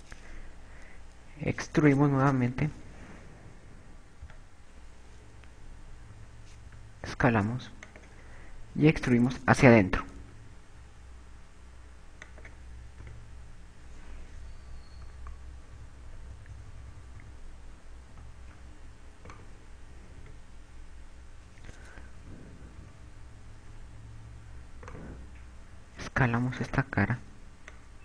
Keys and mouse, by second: 0.8 e, 8.0 s, 9.6 click, 11.8 e, 13.8 click, 14.4 Tab, 16.0-19.7 typing, 20.3 right click, 21.8 Tab, 23.6 KP_6, 24.4 KP_6, 26.4 right click.